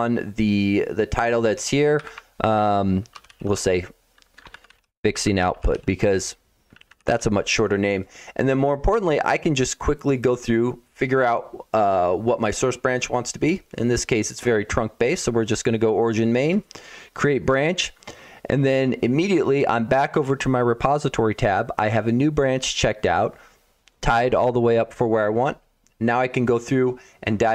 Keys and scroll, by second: 1.8 shift+End, 2.7-7.4 typing.